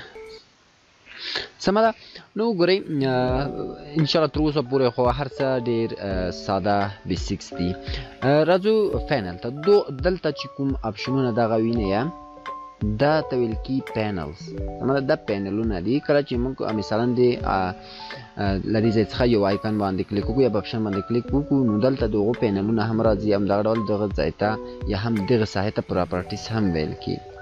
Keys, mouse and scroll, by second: 18.8 click.